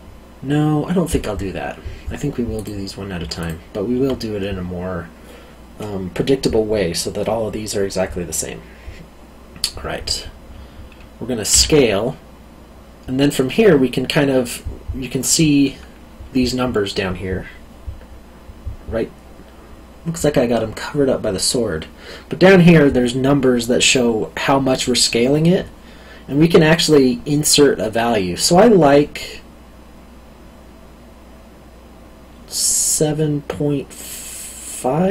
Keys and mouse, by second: 2.5 click, 3.4 alt+click, 11.5 s.